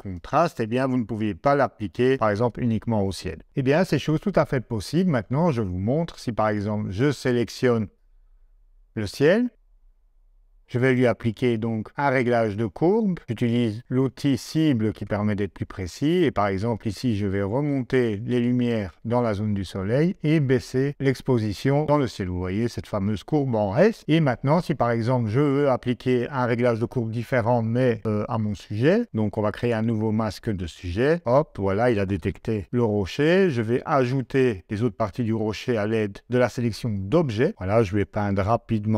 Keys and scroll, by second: 32.6 o.